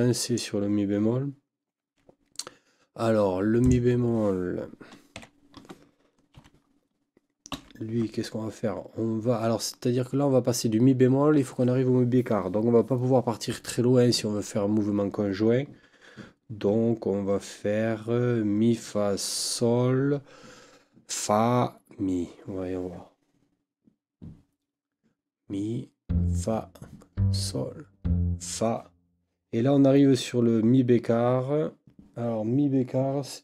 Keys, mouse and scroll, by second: 3.6 click, 5.2 KP_5, 6.4 Right, 7.5 n.